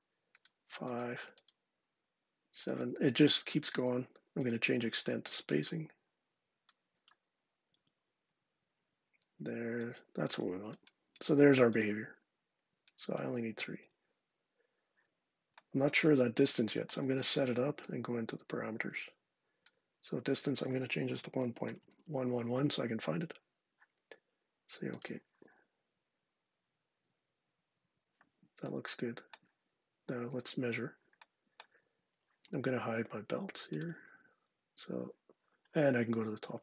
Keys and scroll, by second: 7.5 1, 13.6 3, 20.7-22.7 typing.